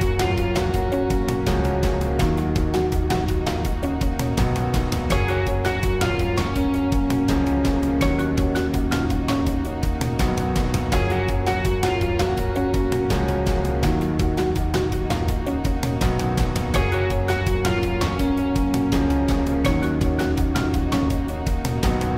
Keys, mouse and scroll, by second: 1.2 s, 2.8 b, 3.2 s, 4.3-4.6 drag, 5.4 z, 5.5 s, 5.9 z, 6.4 b, 7.8-9.4 typing, 10.9 z, 11.0-12.3 drag, 11.2 s, 11.8 r, 12.6 ctrl+r, 12.9 s, 14.0 r, 15.8 ctrl+r, 16.6 r, 18.4 z, 19.3 b, 20.0 click, 20.8-22.1 drag, 21.7 Tab.